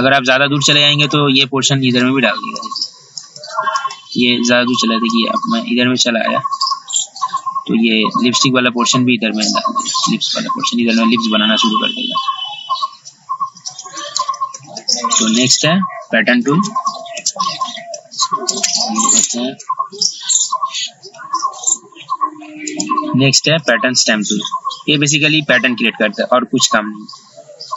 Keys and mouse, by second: 13.7 ctrl+z, 14.0 ctrl+z, 14.1 ctrl+z, 14.3-15.5 typing, 16.6-21.3 typing, 22.8 right click, 23.7-24.8 drag, 25.8-27.7 drag.